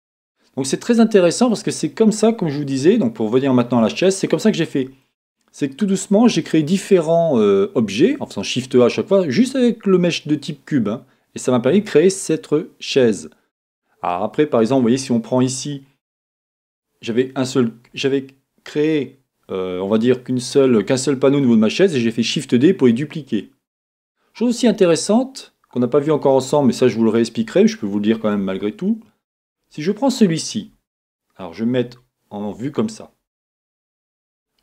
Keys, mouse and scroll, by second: 0.0 middle click, 0.3-1.3 middle drag, 1.4 middle click, 1.8 scroll up 2, 2.8 Tab, 3.7 middle click, 4.3 middle click, 4.4-9.0 middle drag, 7.6-8.6 scroll down 1, 9.7-29.4 middle drag, 16.6 scroll up 1, 25.0-25.4 scroll down 2, 28.4 Tab, 29.4 click, 29.5-34.6 middle drag, 31.9 KP_1, 33.4-33.9 scroll down 1.